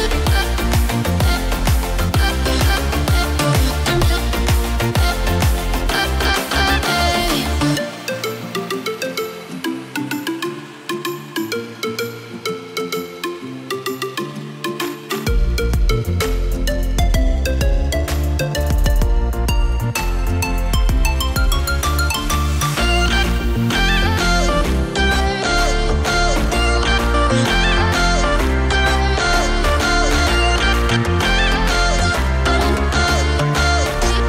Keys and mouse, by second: 3.0-4.0 drag, 4.6 click, 5.5-7.7 drag, 8.3 click, 9.0-11.6 drag, 12.2 click, 13.2 click, 13.9-18.0 drag, 20.9 click, 21.2 click, 22.0 click, 23.2-23.9 drag, 24.3 drag, 24.9 ctrl+c, 25.9 ctrl+v, 26.9-28.2 drag, 29.4 click, 29.8 space, 33.6 space.